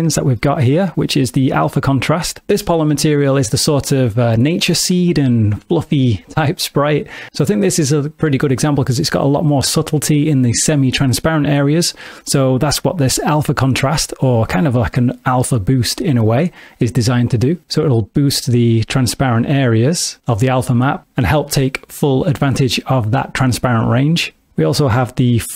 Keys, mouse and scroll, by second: 0.4 middle click, 2.4 space, 17.6 click, 25.1 click.